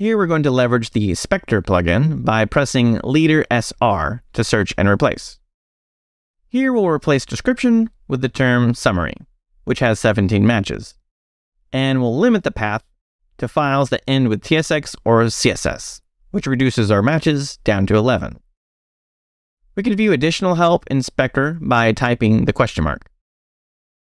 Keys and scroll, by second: 2.3 space, 3.5 s, 4.3 r, 5.9-10.3 typing, 7.8 Escape, 11.7-15.9 typing, 16.0 Escape, 22.3 shift+/.